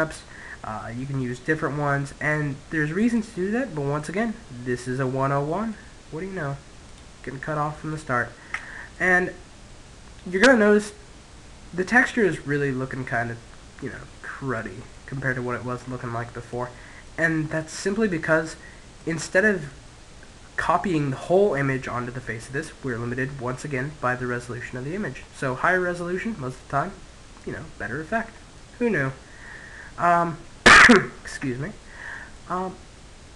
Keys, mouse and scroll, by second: 1.4-6.6 middle drag, 6.2 click, 7.0 middle click, 7.8 Tab, 8.0-9.8 middle drag, 13.4-18.1 middle drag, 18.3-20.1 middle drag, 22.1-23.8 middle drag, 26.2-29.7 middle drag, 31.6-33.3 middle drag.